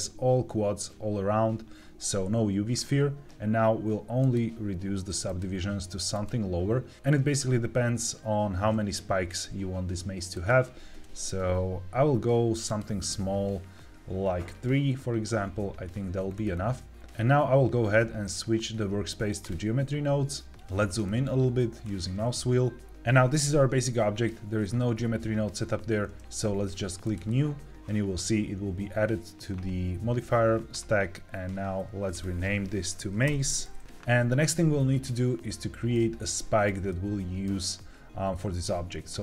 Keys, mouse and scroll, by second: 4.1 click, 5.2 click, 6.0 click, 10.2 click, 12.6 click, 16.2-17.0 scroll down 4, 20.5 n, 20.7-21.7 scroll up 4, 21.7 scroll up 1, 26.9 click, 32.0-33.8 drag, 35.4 scroll down 1, 35.8 shift+middle click, 36.8 middle click, 39.1 shift+a.